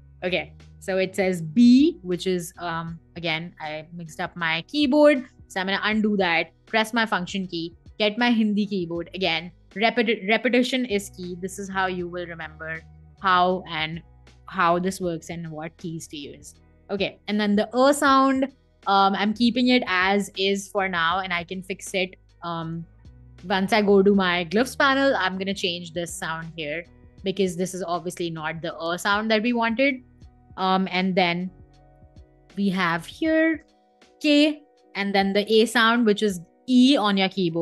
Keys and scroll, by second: 0.7 super+a, 1.2 b, 2.4 BackSpace, 2.8 Escape, 3.8 super+z, 4.4 Escape, 4.9 super+z, 5.4 Escape, 10.4 super+a, 11.1-13.2 typing, 17.0 a, 17.6 n, 17.9 u, 19.2-21.1 typing, 22.3 BackSpace, 22.5 i, 23.3 space, 29.8 Escape, 33.3 space, 33.8 k, 35.1 e.